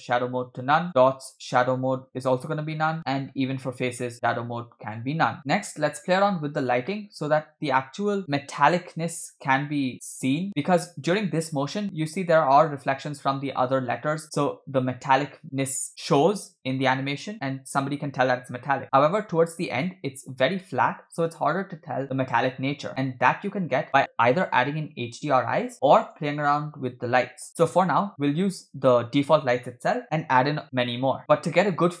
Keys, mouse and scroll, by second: 0.9-1.3 scroll down 1, 1.5-2.4 drag, 2.7 scroll up 1, 3.0 click, 3.0 scroll down 1, 3.3-3.8 scroll down 5, 4.2-5.2 drag, 6.2-6.8 scroll up 2, 6.9 middle click, 9.1 click, 10.3 click, 19.3-20.3 drag, 26.0 click, 31.2-32.0 shift+middle drag.